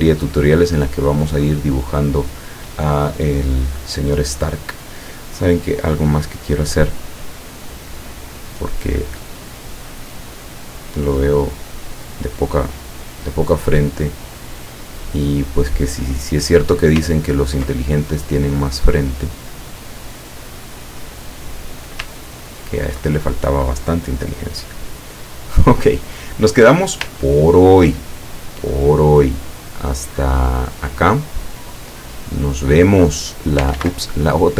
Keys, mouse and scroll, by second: 0.4 ctrl+scroll up 2, 0.9 ctrl+scroll down 2, 4.7 click, 7.6-9.5 drag, 10.6-14.1 drag, 15.4 click, 16.4-16.7 scroll up 2, 16.7-17.1 scroll down 2, 17.3 ctrl+scroll up 2, 18.2 ctrl+click, 19.4-21.9 drag, 22.4-22.9 ctrl+scroll down 2, 25.4 click, 27.3 ctrl+scroll up 2, 28.4 click, 28.9 click, 29.4 click, 30.0 click, 31.3 click, 32.9 click, 33.8 ctrl+z, 34.3-34.5 ctrl+drag.